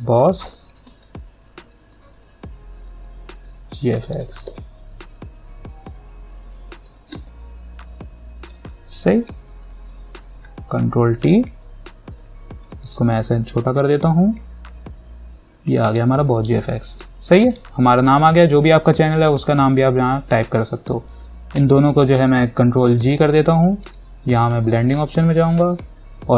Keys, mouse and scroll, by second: 0.0-2.1 typing, 3.3 shift+f, 6.1 g, 7.4-8.6 typing, 9.8 click, 11.0 ctrl+t, 12.4-15.9 alt+drag, 21.7 ctrl+click, 23.2 ctrl+g, 24.1 right click, 24.8 click.